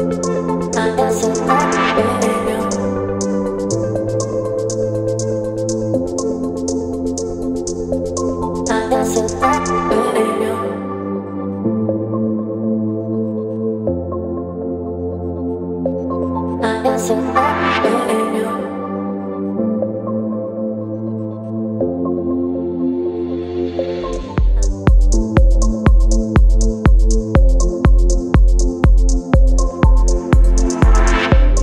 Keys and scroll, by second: 0.0 space, 1.8 Delete, 4.6 Delete, 5.6 Delete, 8.4 Delete, 10.5 Delete, 12.2 space, 30.6 space.